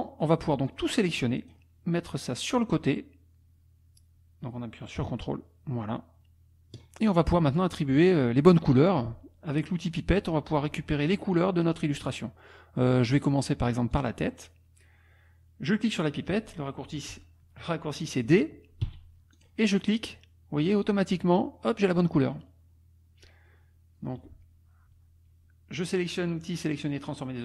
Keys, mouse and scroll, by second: 0.7-1.7 drag, 2.6-6.9 drag, 7.4 click, 8.1 click, 13.9 click, 18.9 d, 19.3 click.